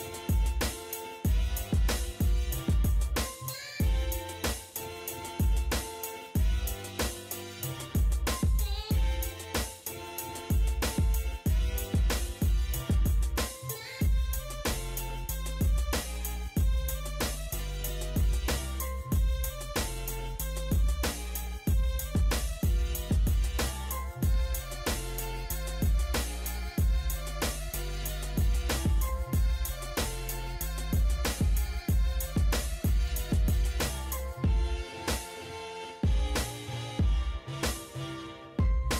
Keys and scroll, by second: 0.4 e, 0.4 space, 9.5 Escape, 14.0 m, 14.2 space, 17.9 p, 18.0 space, 26.3 Escape, 37.8 Escape.